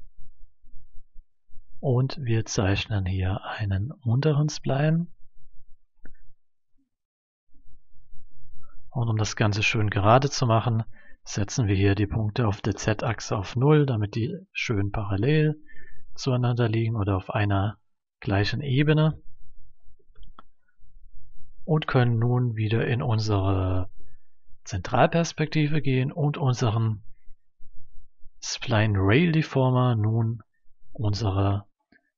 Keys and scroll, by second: 12.7 0, 13.0 Return, 19.9 0, 20.1 Return.